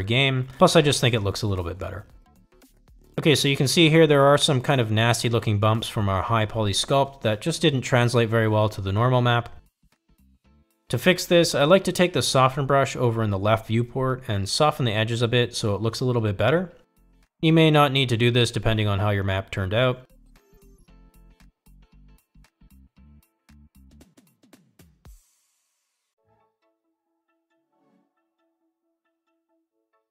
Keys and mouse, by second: 0.6 click, 2.3-3.0 middle drag, 5.6 middle drag, 6.1 middle click, 6.5 middle click, 7.3 shift+middle drag, 8.1 middle click, 8.8 middle click, 11.1 click, 16.7 f, 20.5 shift+click, 21.4 ctrl+click, 21.9 ctrl+click, 22.4 shift+middle click, 22.8 ctrl+middle drag, 23.3 f, 24.0-30.1 drag.